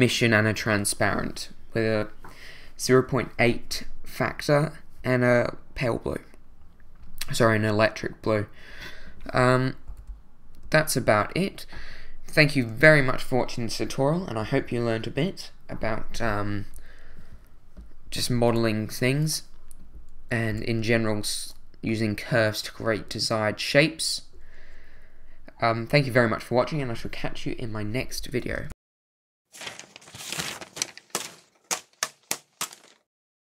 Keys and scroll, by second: 9.9 2, 20.5 2.